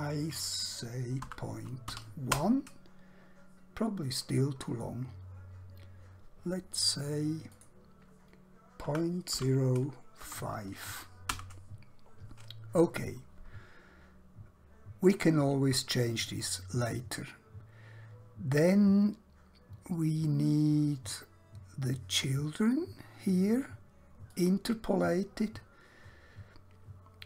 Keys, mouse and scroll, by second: 1.2-1.9 typing, 2.4 Return, 7.6 click, 8.8-10.2 typing, 11.4 Return, 17.0-18.3 scroll down 1, 22.3 click.